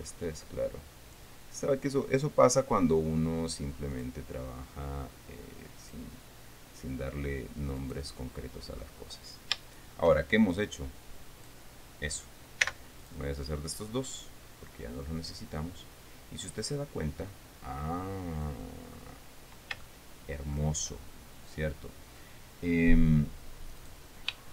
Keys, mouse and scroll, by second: 1.8-2.8 scroll up 2, 3.0-3.4 scroll up 2, 4.5 click, 6.4 click, 8.3 right click, 10.2 shift+right click, 11.0 shift+click, 13.2 x, 13.6 click, 14.8-15.1 scroll down 1, 15.2-19.2 middle drag, 19.4-19.7 scroll up 2, 20.4 shift+middle click, 21.6-22.1 shift+scroll up 3, 22.2-22.6 scroll down 2, 24.3 right click.